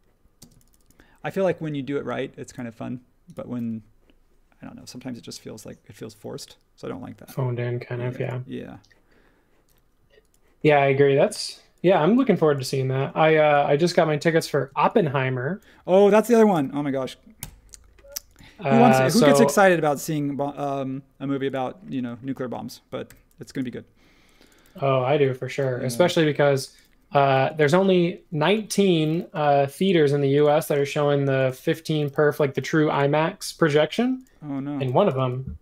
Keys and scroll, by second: 0.4 space, 16.5 super+g, 17.4 BackSpace, 19.1 r, 21.9 space, 23.0 r, 24.6 e, 25.9 space, 27.2 e, 28.8 space, 29.3 l, 31.3 typing, 32.5 l, 34.9-35.6 typing.